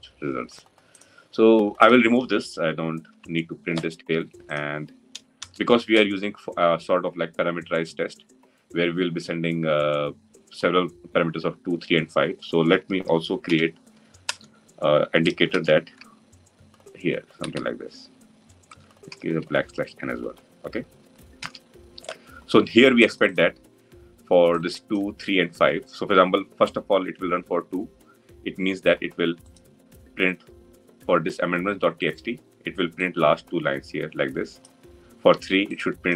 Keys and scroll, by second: 2.9 ctrl+y, 14.1 Return, 18.2 Return, 21.2 ctrl+alt+l.